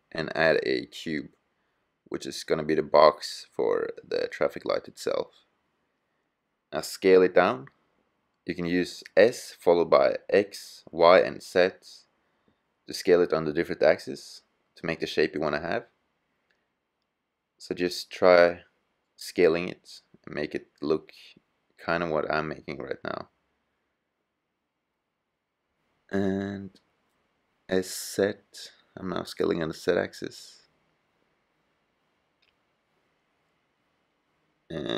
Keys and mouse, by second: 1.1-1.9 drag, 2.0 click, 2.3 click, 5.2 s, 7.5 click, 8.6 s, 11.7 s, 15.8 s, 17.6-18.0 middle drag, 18.0-19.1 drag, 18.0 g, 19.2 click, 22.8 s, 24.4-25.0 drag, 26.1 s, 32.1-34.5 middle drag, 34.5 s.